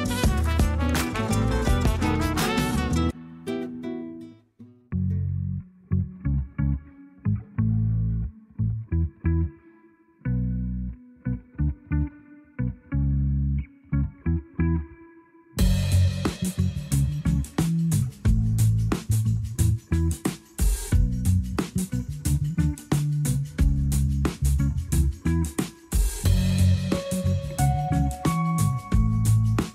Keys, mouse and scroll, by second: 0.0 p, 1.4 Tab, 1.7 click, 2.6 Tab, 3.2 a, 3.8 s, 6.4-7.4 scroll up 1, 7.4 alt+e, 10.6 scroll up 2, 11.1 shift+middle click, 11.9 a, 12.1 a, 12.3-12.7 scroll down 1, 12.7 Tab, 14.1-15.0 middle drag, 15.0-15.5 scroll up 3, 15.5-16.0 shift+middle drag, 16.0-18.8 scroll up 1, 18.8-19.8 scroll down 1, 19.8-21.0 scroll down 1, 21.0-24.0 right drag, 24.5-25.1 scroll down 2, 25.1 KP_1, 27.1 shift+d, 27.8-28.7 scroll up 3, 28.7 g.